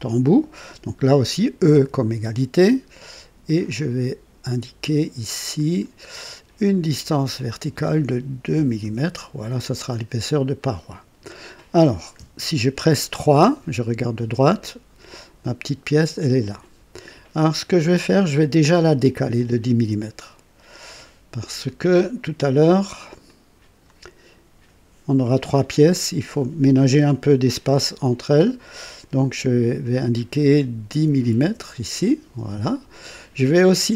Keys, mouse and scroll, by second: 1.6 typing, 3.6 click, 5.5 click, 7.4 click, 8.5 KP_2, 8.8 Return, 10.5 click, 12.1 KP_3, 19.3 click, 19.9 click, 23.2 click, 30.7 KP_1, 31.3 KP_0.